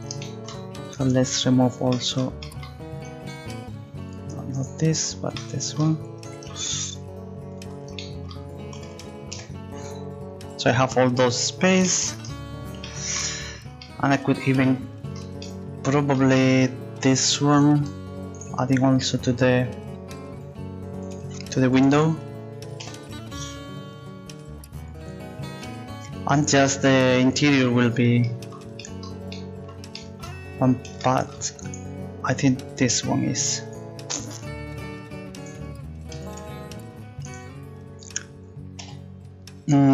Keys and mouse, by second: 0.9-2.5 right drag, 5.6 right click, 8.9 a, 15.6 middle click, 17.1 middle click, 21.8 a, 21.9 a, 36.3 a, 38.8 g.